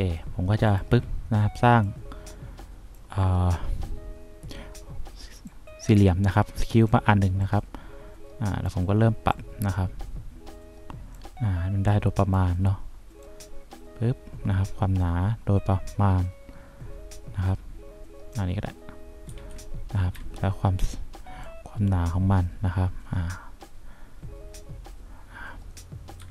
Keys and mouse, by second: 2.0-3.1 drag, 5.6-7.0 drag, 7.6-9.0 drag, 9.4-11.3 drag, 12.1 click, 13.7-18.0 drag, 19.4 F2, 20.3 F3.